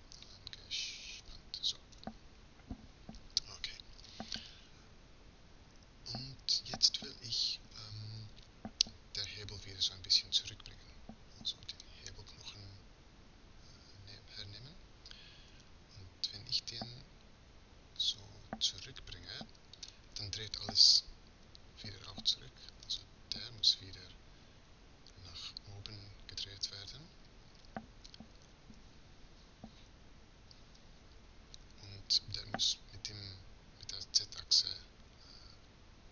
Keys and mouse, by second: 1.1 n, 7.3-15.5 middle drag, 15.5 r, 23.6-25.3 drag, 26.9 middle click, 30.0 KP_1.